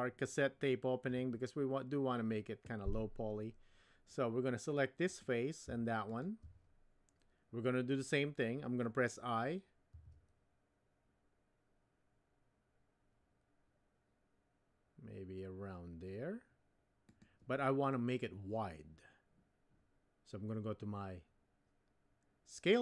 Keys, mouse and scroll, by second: 5.2 click.